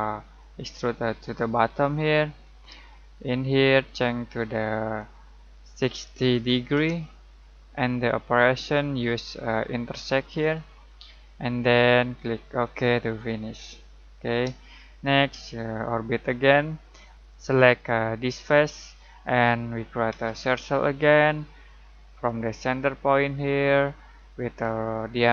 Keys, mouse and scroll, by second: 0.4-5.0 drag, 5.0-6.3 drag, 5.3-6.8 typing, 8.5-14.6 drag, 14.6-17.1 shift+middle drag, 16.1 typing, 17.1 Escape, 18.1 click, 20.1 c, 22.2 click.